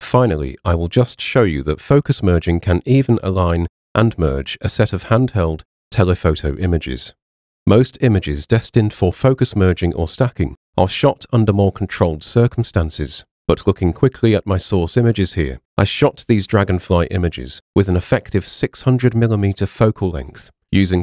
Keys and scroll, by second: 4.5 super+w, 5.9 super+w, 12.5 space, 14.9 Down, 16.0 Down, 17.2 Down, 18.5 Down, 19.6 Down, 20.8 Down.